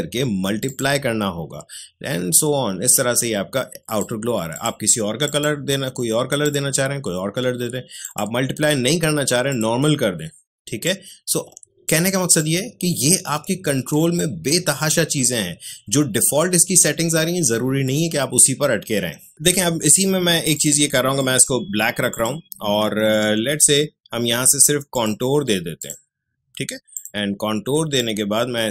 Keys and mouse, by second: 24.9-28.7 drag.